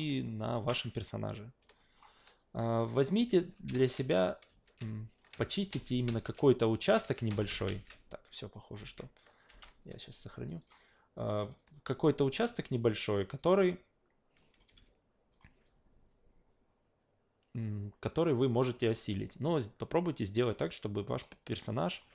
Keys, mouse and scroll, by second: 1.8 alt+middle click, 2.6-3.0 drag, 3.3 ctrl+z, 3.9-7.7 typing, 5.0 alt+middle click, 6.5 alt+middle drag, 8.5 drag, 8.8 alt+v, 9.5 alt+v, 10.6 click, 11.4 click, 13.4 click, 14.4 click, 14.7 3, 15.3 click, 19.9 click, 21.7 drag.